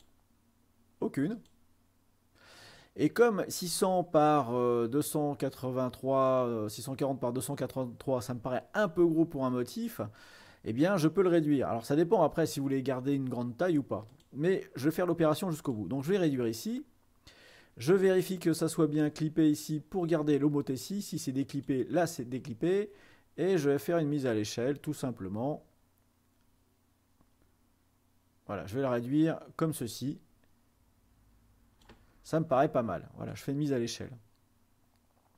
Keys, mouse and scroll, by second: 0.0 click, 1.4-2.7 drag, 14.2-15.4 drag, 15.7-16.8 drag, 19.1-20.3 drag, 21.7-22.8 drag, 23.7-32.9 drag, 33.5-34.5 drag.